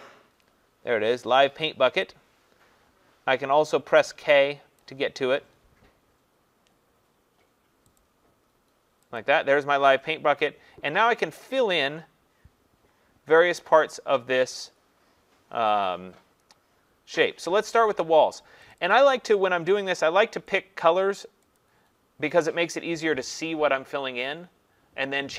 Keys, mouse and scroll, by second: 4.8 click, 8.0 click, 9.2 click, 18.7 click, 18.9 click, 20.6 click, 21.6 click.